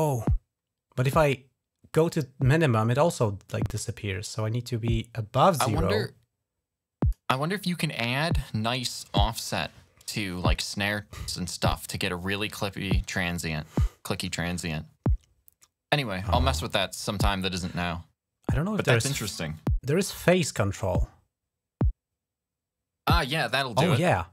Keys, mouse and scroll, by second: 19.3-24.3 drag.